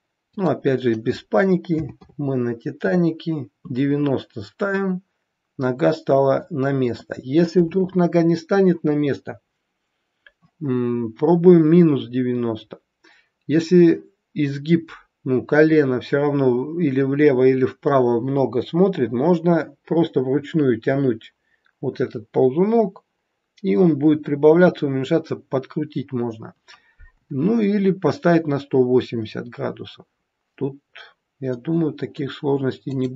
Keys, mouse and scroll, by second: 0.2 click, 4.5 middle click, 29.5-30.0 scroll down 2, 30.8-31.2 scroll up 3, 31.5 middle click, 32.8 click.